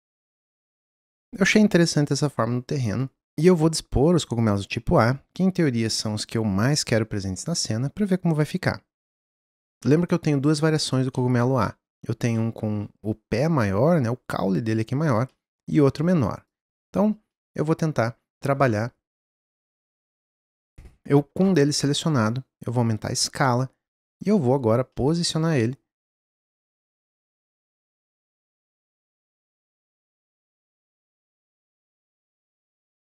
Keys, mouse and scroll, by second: 0.0-0.3 scroll down 2, 0.3-0.7 middle drag, 0.7 click, 9.7 scroll up 5, 9.8-16.5 middle drag, 16.5 click, 17.3-19.2 middle drag, 19.2 scroll down 1, 19.4-21.9 middle drag, 21.9 s, 24.0-26.2 middle drag, 26.2 click, 27.5-28.5 middle drag, 28.5 click, 30.2-31.9 middle drag, 31.9 click.